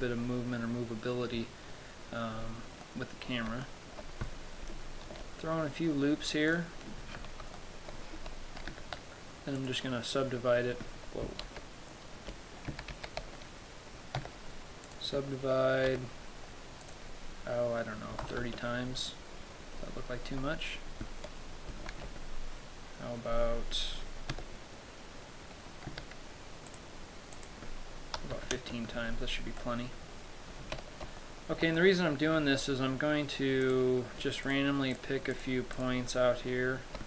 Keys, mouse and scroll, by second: 3.1 middle click, 4.0 shift+middle click, 5.4 ctrl+r, 7.0 click, 7.4-7.9 scroll up 1, 7.9 shift+middle click, 9.0 w, 11.8 ctrl+z, 13.0 a, 13.2 a, 14.5 w, 16.2 t, 17.1 click, 20.0-21.1 scroll up 9, 21.2-22.3 scroll down 1, 22.3 ctrl+z, 22.3-23.6 scroll down 1, 24.6 w, 26.2 w, 27.7 click, 29.9 middle click, 30.8 Tab, 31.5 shift+middle click, 32.1 middle click, 32.7 Tab, 32.9 middle click, 33.9 right click, 34.9 shift+right click, 35.3 shift+right click, 36.0 shift+right click.